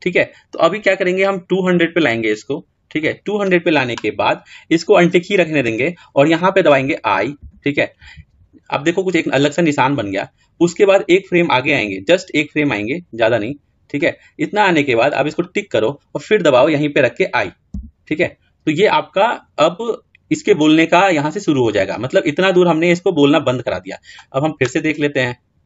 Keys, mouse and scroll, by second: 7.4 |, 11.6 click, 15.3-17.7 drag.